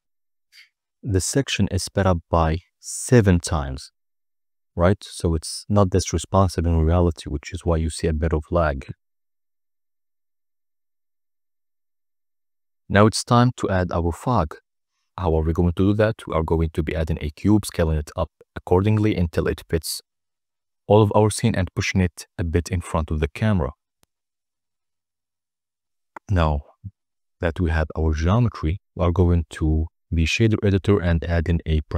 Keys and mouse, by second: 6.0-9.7 drag, 9.8 click, 10.5 n, 10.7 n, 10.8 middle drag, 12.1 shift+a, 14.9 s, 15.4 1, 15.8 0, 16.0 0, 17.3 Return, 17.9-19.3 typing, 18.6 Return, 20.4-21.8 typing, 21.4 Return, 23.7 Tab, 23.9 s, 24.0 z, 25.9 Tab, 26.0-27.2 typing, 26.7 Return, 27.5 Return, 28.2-28.9 middle drag, 30.0 click, 30.5 click, 30.9 n, 31.0 n, 31.9 click.